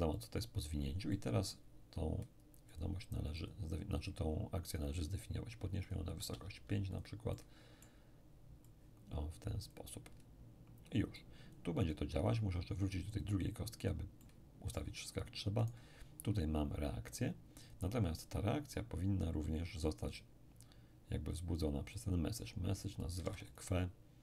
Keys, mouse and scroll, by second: 1.1-2.5 middle drag, 2.7-4.5 drag, 4.8 click, 6.3 click, 6.3 5, 7.3-10.1 drag, 7.3-10.1 middle drag, 10.1-11.2 scroll down 1, 11.2-14.2 drag, 14.2-16.7 middle drag, 15.6 right click, 17.7 click, 20.1 click, 22.0 click, 23.1 click, 23.1 q, 23.2 w, 23.2 e.